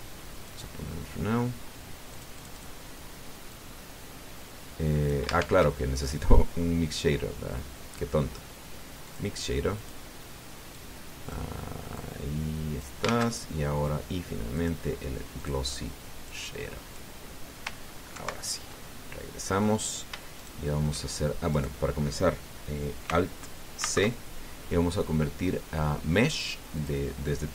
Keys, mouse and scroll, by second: 0.3 click, 1.2 click, 2.9 click, 4.3-6.0 drag, 6.1 shift+a, 9.8 click, 10.6 click, 11.5 click, 12.8-13.8 drag, 13.8 shift+a, 15.3 click, 16.2 click, 17.1 click, 18.9 ctrl+Right, 21.1 shift+right click, 22.3 right click, 24.6 alt+c.